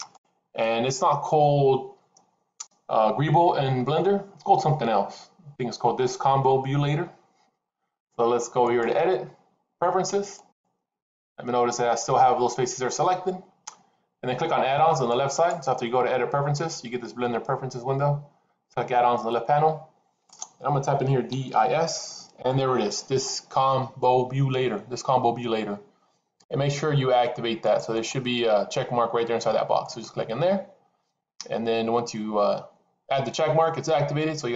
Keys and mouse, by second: 8.6-12.6 drag.